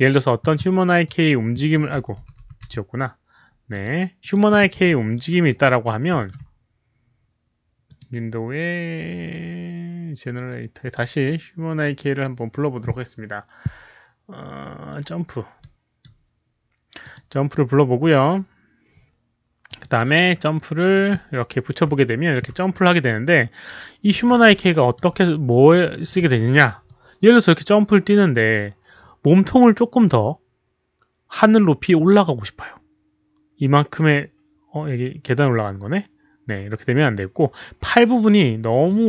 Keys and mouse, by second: 1.0-1.7 drag, 1.5 alt+right click, 2.6 click, 2.6 alt+right click, 2.6 z, 3.7 click, 4.2 click, 4.8 alt+click, 4.8 z, 5.2 alt+right click, 5.6 alt+drag, 6.1 alt+middle click, 7.8 alt+click, 7.9 z, 10.8 alt+click, 10.8 alt+middle click, 10.8 alt+right click, 10.8 z, 13.0 alt+click, 13.0 alt+middle click, 13.0 alt+right click, 14.5 alt+click, 14.5 alt+middle click, 14.8 alt+right click, 15.5 alt+click, 16.0 alt+right click, 17.0 click, 19.6 click, 19.6 right click, 19.8 right click, 20.8 click, 21.6 right click, 21.9 alt+click, 22.8-24.3 alt+drag, 24.5 alt+click, 25.0 alt+right click, 25.4 alt+middle click, 25.8 alt+click, 25.8 alt+right click, 26.1 alt+right click, 26.8-38.8 drag, 27.6 alt+middle click, 27.6 alt+right click, 32.3 alt+middle click, 32.3 alt+right click, 35.4 alt+right click, 35.6 alt+middle click, 35.6 alt+right click.